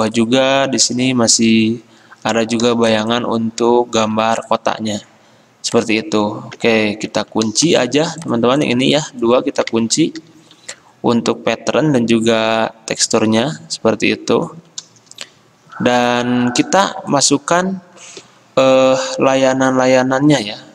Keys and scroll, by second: 10.4 ctrl+2.